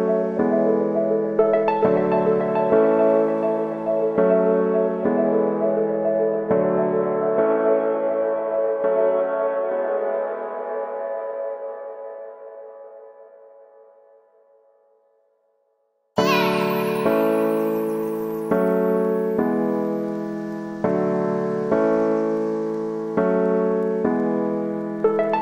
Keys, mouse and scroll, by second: 0.0 x, 0.2 click, 1.0 scroll down 1, 1.3 shift+middle click, 1.6-2.5 scroll up 1, 2.5-3.7 drag, 3.7 alt+right click, 3.9 click, 4.3 alt+right click, 4.7-6.3 drag, 6.3 x, 6.5 click, 7.4 ctrl+z, 8.1 click, 8.6 middle click, 9.1 alt+right click, 9.4 click, 9.7 alt+right click, 10.0-13.0 drag, 13.0 alt+right click, 13.4 click, 13.7 alt+right click, 13.9-16.8 drag, 16.8 alt+right click, 17.1 click, 17.7 scroll down 4, 17.9 shift+middle click, 18.6-19.1 scroll up 4, 19.1 shift+middle click, 19.6 alt+right click, 19.8-21.5 drag, 21.5 scroll down 2, 21.7 shift+middle click, 22.1 scroll down 1, 22.2-24.2 middle drag, 24.2 click, 24.4 scroll up 1, 24.5 shift+middle click, 24.9 a, 25.0 a.